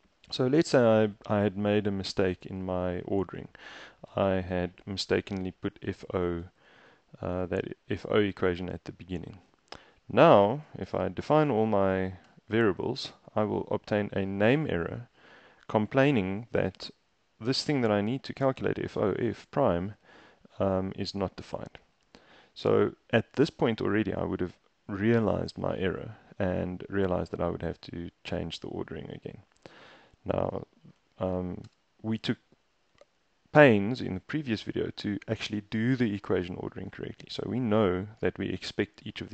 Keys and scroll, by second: 1.5 Up, 1.9 Up, 2.4 Right, 2.8 Down, 3.0 Down, 4.2 shift+Down, 5.2 super+x, 5.7 Up, 6.1 Up, 6.3 Up, 6.5 Up, 6.9 Up, 7.4 super+v, 10.9 shift+Return, 11.5 shift+Return, 12.3 shift+Return, 28.5 super+z, 29.2 super+z, 31.7 shift+Return, 33.0 super+Tab.